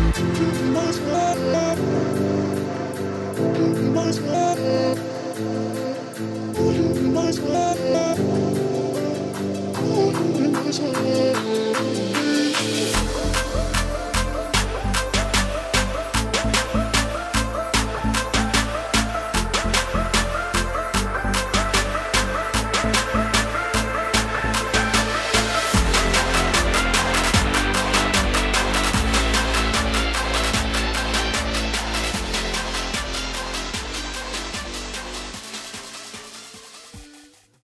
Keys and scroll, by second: 3.7 ctrl+z, 14.8 ctrl+t, 21.5 ctrl+l.